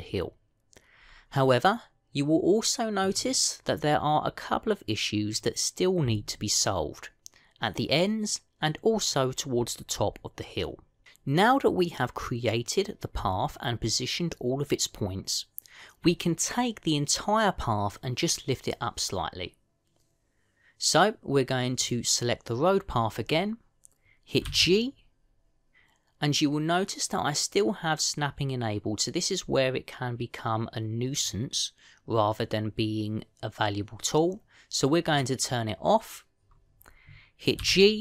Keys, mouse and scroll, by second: 1.8-2.2 scroll up 2, 2.2 middle click, 22.7 click, 25.4 g, 36.0 click.